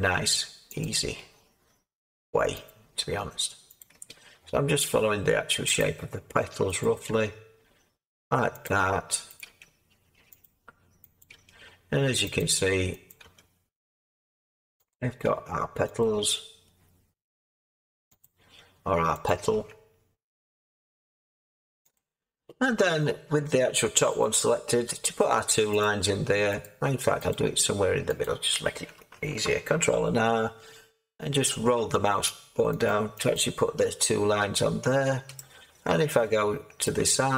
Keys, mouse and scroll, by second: 29.7 ctrl+r.